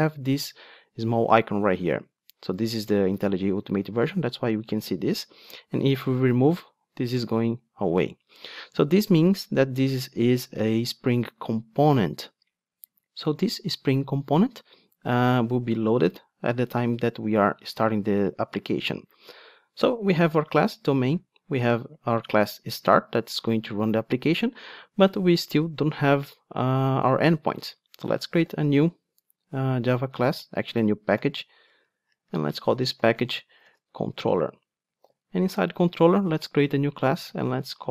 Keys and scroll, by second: 6.3 super+x, 8.6 super+z, 28.5 super+n.